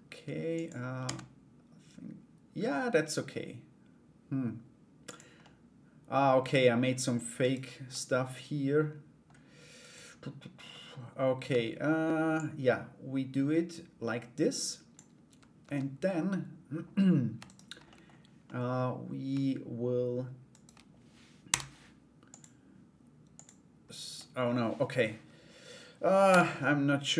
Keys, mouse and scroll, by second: 5.1 middle click, 6.0 Tab, 7.0 right click, 7.5-8.8 middle drag, 9.3 right click, 10.3 middle click, 11.1 Tab, 11.9-14.8 drag, 14.8 Tab, 17.0 right click, 17.4 middle click, 18.0 middle click, 20.1 shift+right click, 23.7 middle click.